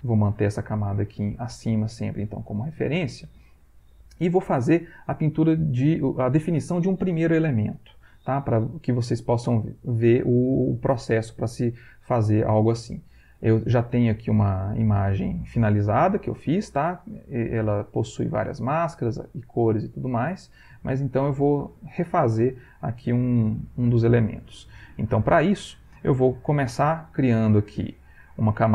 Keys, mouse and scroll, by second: 3.0 middle click, 14.7 click, 20.5 click, 22.3 middle click, 23.4-24.4 ctrl+middle drag, 28.0 click.